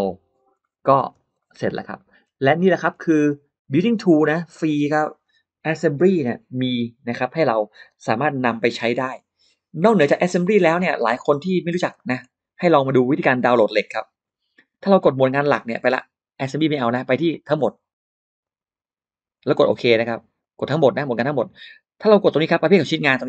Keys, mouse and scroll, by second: 0.4-0.7 scroll up 1, 0.4 middle click, 0.9 space, 0.9 click, 1.2 middle click, 1.3-2.4 scroll down 2, 1.8 middle click, 2.5 scroll up 1, 2.6 middle click, 3.5 click, 10.4-10.7 scroll down 1, 10.7 middle click, 11.1-11.4 scroll down 2, 11.4 scroll up 2, 11.8 middle click, 12.5 click, 12.8 middle click, 15.6 click, 18.2 click, 20.2 click.